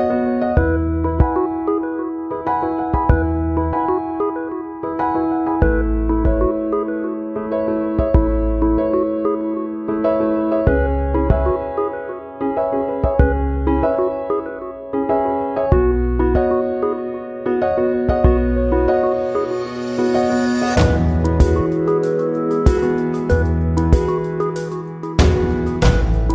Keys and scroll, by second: 15.7 ctrl+0, 20.4 ctrl+c, 20.5 ctrl+v, 22.0 ctrl+-, 24.6 ctrl+0.